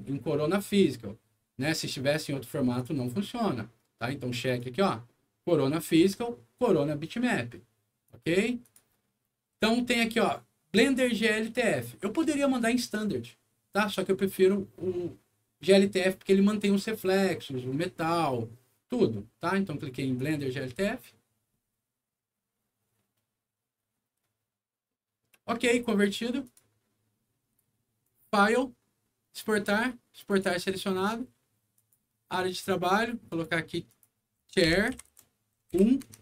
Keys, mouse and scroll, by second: 2.7 click, 4.4 click, 8.0 click, 8.6 click, 20.1 click, 26.0 click, 26.4 click, 28.0 click, 30.2 click, 31.7 click, 33.2 click, 33.8 click, 34.1-35.7 typing, 36.0 Tab.